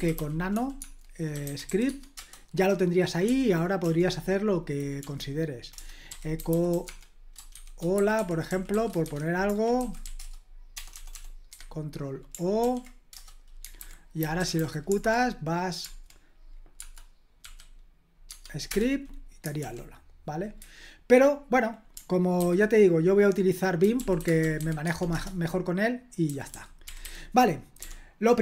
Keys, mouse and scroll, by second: 0.0-2.2 typing, 3.2 o, 5.0 Down, 5.8-11.1 typing, 11.5 Escape, 12.6 ctrl+o, 13.1 Return, 13.8 super+h, 14.0-15.1 typing, 16.8 space, 17.4 s, 18.3 Tab, 18.7 Return, 19.6 super+l, 22.4 ctrl+c, 23.6-27.8 typing, 25.1 Return.